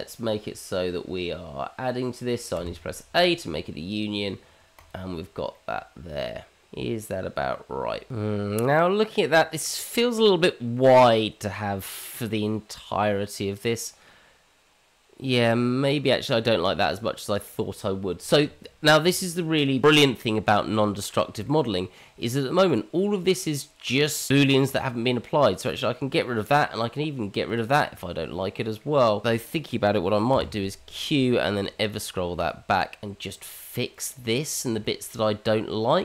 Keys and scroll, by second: 29.2 ctrl+z, 30.3 q.